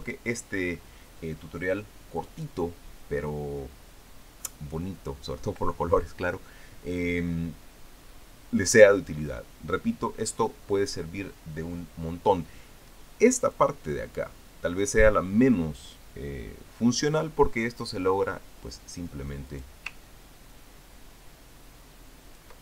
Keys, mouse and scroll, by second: 0.0-0.4 ctrl+scroll up 4, 0.8 ctrl+click, 14.4-15.9 drag, 20.3 click, 21.3-22.6 ctrl+drag.